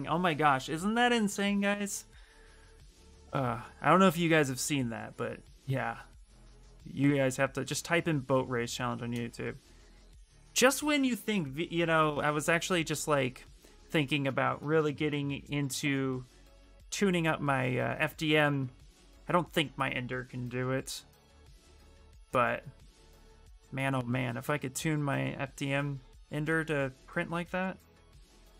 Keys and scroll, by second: 9.8 s, 14.6 b, 15.0 h, 16.1 s, 20.7 s, 21.1 s, 22.3 s.